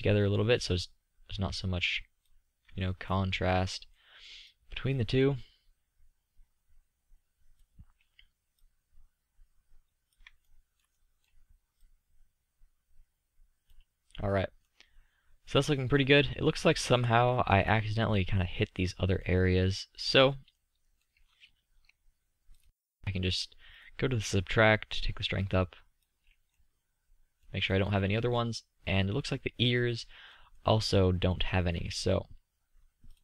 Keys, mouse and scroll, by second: 0.1-3.0 middle drag, 3.0 click, 3.2 middle click, 4.3-5.0 middle drag, 5.0-5.8 drag, 5.8-9.1 middle drag, 9.1-10.6 drag, 10.6-11.2 middle drag, 12.4-13.6 drag, 14.4-17.0 middle drag, 17.0 z, 26.7-27.1 middle drag.